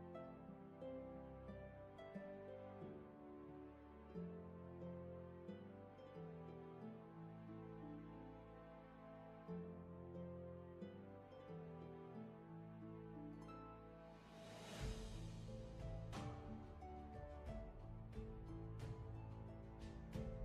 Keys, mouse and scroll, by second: 0.0 scroll down 1, 0.7 scroll up 1, 1.5-2.2 scroll down 1.